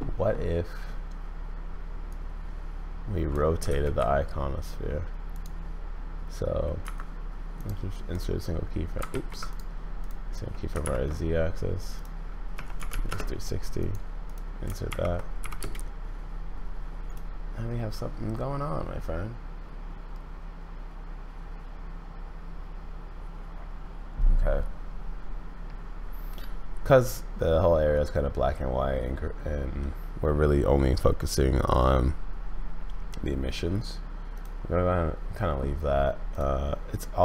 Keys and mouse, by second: 2.2-3.3 drag, 3.7 ctrl+z, 5.4-7.0 drag, 7.7 click, 9.1 ctrl+z, 9.5 click, 10.8 shift+Right, 13.8 middle click, 14.9 shift+Left, 15.4 Left, 15.6 space, 17.1 click, 34.3 click, 36.9 click.